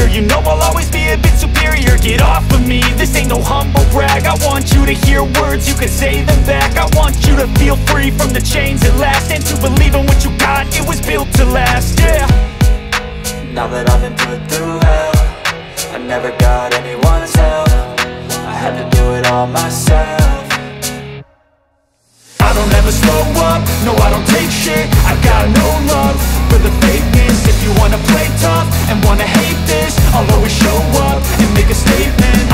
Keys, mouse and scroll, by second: 0.6 space, 1.2-4.0 drag, 4.0 space, 4.5-11.8 drag, 11.8 click, 12.4 space, 12.5 click, 12.6 space, 13.0-14.4 drag, 14.4 space, 14.5 click, 14.6 space, 15.0-18.2 drag, 18.2 space, 18.2 click, 18.3 space, 18.8-25.5 drag, 25.5 space, 25.6 click, 25.7 space, 26.2-30.8 drag, 30.8 space, 30.8 click, 31.0 space, 32.0-32.5 drag.